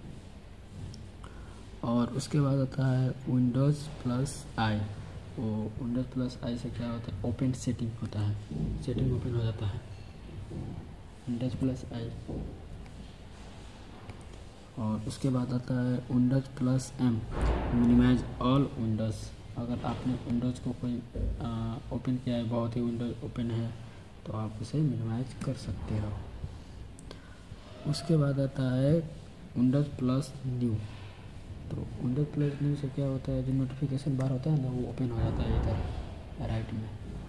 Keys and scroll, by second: 7.9 super+i, 11.4 super+i, 25.3 super+m, 34.0 super+n.